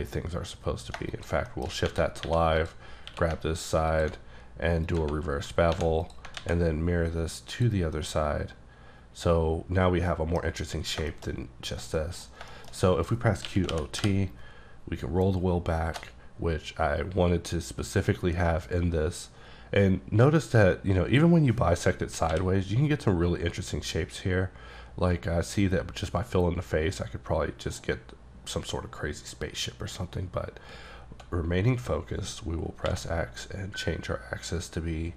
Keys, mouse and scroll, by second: 1.0 shift+click, 1.6 shift+middle click, 1.7 shift+scroll up 3, 2.2 3, 2.6 click, 3.0-3.9 scroll up 3, 3.1 q, 3.9 ctrl+click, 4.8 click, 5.2-5.8 scroll down 7, 5.7 1, 6.1 click, 6.3 alt+click, 6.4 x, 6.7-7.6 scroll down 3, 7.6 click, 8.0 middle click, 10.9 scroll down 3, 11.1 shift+middle click, 12.3 middle click, 12.4-13.5 scroll up 4, 12.5 shift+middle click, 13.5-14.0 typing, 15.1-16.0 scroll down 1, 16.0-17.0 shift+scroll down 2, 22.3 f, 32.9 x.